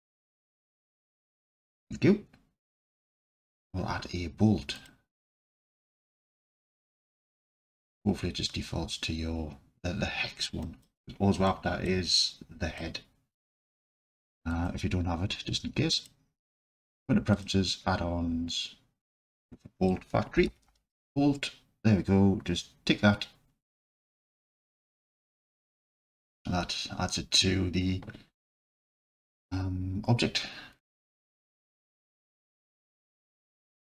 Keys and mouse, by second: 0.1-0.5 drag, 1.2 shift+a, 10.8 click, 11.5-11.9 alt+drag, 12.9-13.5 alt+drag, 14.5-16.2 drag, 31.0-32.7 alt+drag.